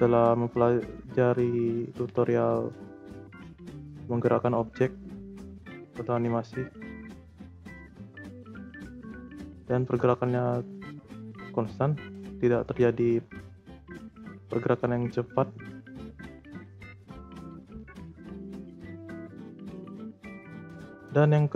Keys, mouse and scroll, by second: 7.0 space, 8.7 space, 9.1-11.3 drag, 11.3 space, 13.0 space, 13.6-16.6 drag, 18.8-19.3 scroll up 2, 19.3-21.5 shift+middle drag.